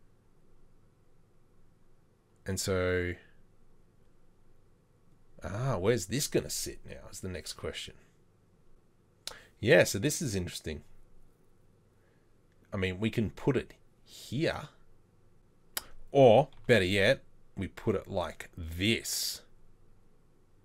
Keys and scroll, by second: 16.7 r.